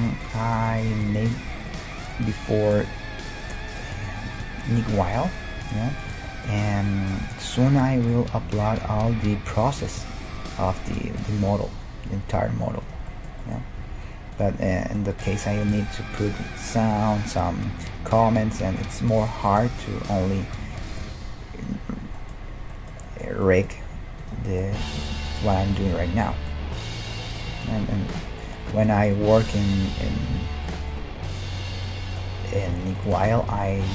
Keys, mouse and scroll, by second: 1.1-3.1 right drag, 1.3 g, 4.3-7.8 right drag, 4.5-9.5 middle drag, 6.6 g, 8.6-10.6 right drag, 8.8 g, 10.6-12.6 middle drag, 11.3 g, 12.1-13.8 right drag, 12.4 g, 13.1 middle click, 13.8 g, 15.1-16.9 right drag, 15.6 g, 19.0 right click, 19.1-27.5 middle drag, 19.7 g, 21.1 g, 23.9 g, 25.2-27.3 right drag, 27.5 g, 29.1-31.1 right drag, 29.9 g, 32.8 right click, 33.3 g.